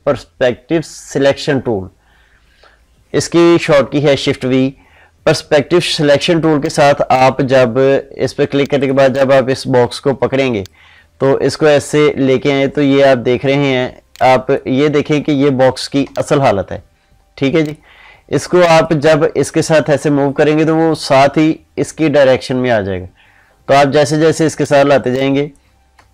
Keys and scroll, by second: 14.9 ctrl+z, 25.8 ctrl+space.